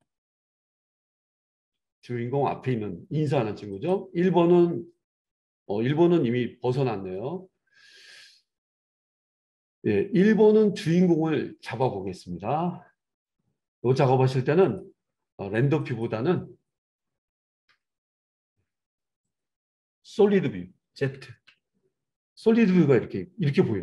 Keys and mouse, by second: 14.8-15.9 middle drag, 15.9 click, 16.0-19.3 middle drag, 17.7 n, 19.3 click, 19.4-23.8 middle drag, 19.4 n, 21.3 z.